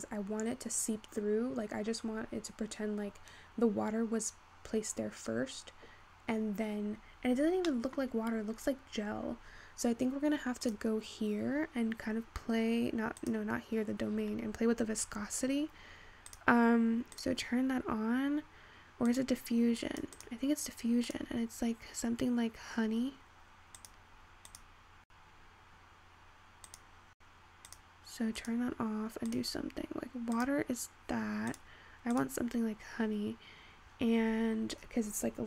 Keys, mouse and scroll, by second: 2.2-5.2 scroll down 3, 6.7-7.3 scroll up 5, 7.3-7.6 scroll down 6, 7.6-8.6 scroll up 5, 7.8 middle drag, 8.6-9.4 scroll down 7, 10.7 click, 11.5-13.2 scroll down 13, 13.2 click, 14.2-15.2 scroll down 14, 15.2-16.5 scroll down 11, 16.5-18.1 drag, 19.1-24.1 drag, 27.3-28.1 drag, 28.5-34.2 drag, 34.2-34.6 scroll up 4, 34.6-35.4 scroll down 4.